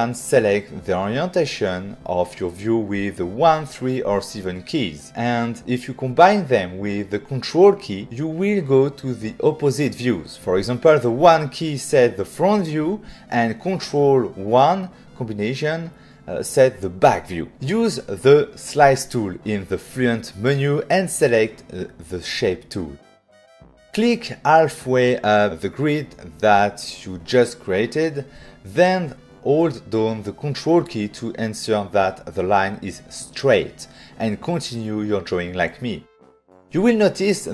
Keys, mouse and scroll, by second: 3.7 click, 4.7 middle click, 14.2 middle click, 14.5 ctrl+1, 17.5 f, 20.1 click, 23.2 click, 28.5 click, 30.7 click, 32.6 ctrl+click, 35.2 ctrl+click, 36.9 ctrl+click.